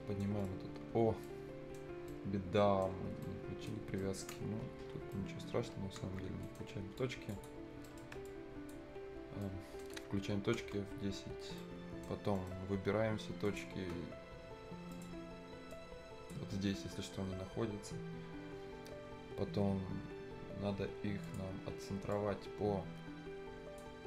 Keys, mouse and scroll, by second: 0.3 right click, 0.3 scroll up 1, 0.4 middle click, 0.7-1.0 scroll down 1, 1.2 right click, 1.9 scroll up 1, 2.1 right click, 3.0 scroll down 1, 3.2-6.0 right drag, 6.0 F10, 6.3 scroll up 1, 6.4 right click, 6.6 scroll down 1, 7.0 click, 7.7 scroll up 1, 8.1 Escape, 8.3 click, 8.9-9.2 scroll up 1, 9.4 right click, 10.6 F10, 11.6 right click, 12.4 middle click, 12.4-13.5 scroll up 1, 13.5 click, 16.0-18.7 drag, 21.2-24.0 drag.